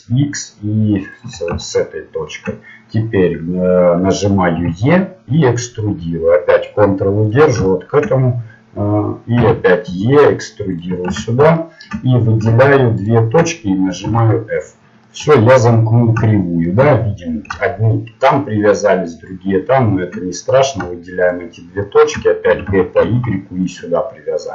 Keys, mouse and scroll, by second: 1.7 middle click, 4.6 e, 9.4 e, 11.6-13.1 middle drag, 13.1 right click, 14.2 f, 18.6 middle click, 20.5-22.5 right drag, 21.8 middle click, 22.5 g.